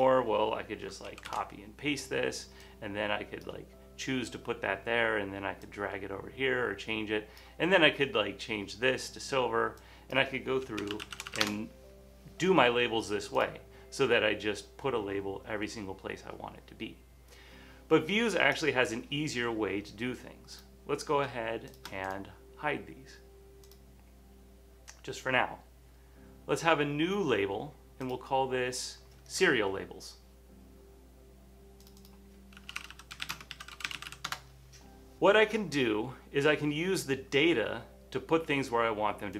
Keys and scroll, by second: 1.2 super+c, 1.4 super+v, 10.7-12.3 typing, 32.5-34.7 typing.